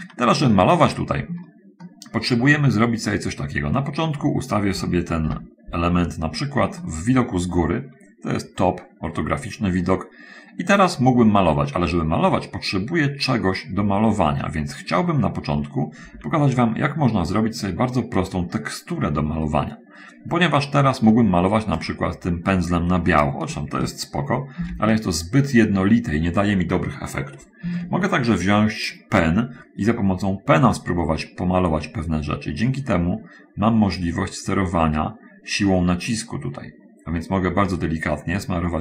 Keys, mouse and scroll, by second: 1.1 shift+middle click, 2.2-4.8 shift+middle drag, 5.6 7, 7.1 shift+middle click, 22.1-23.7 drag, 24.9 ctrl+z, 31.9-38.8 drag.